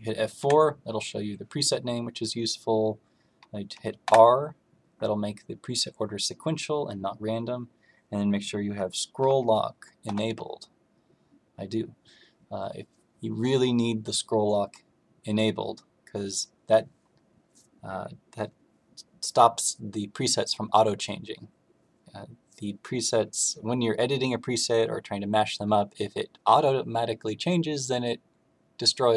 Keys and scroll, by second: 0.3 F4, 4.0 r, 9.1 Scroll_Lock, 10.0 Scroll_Lock.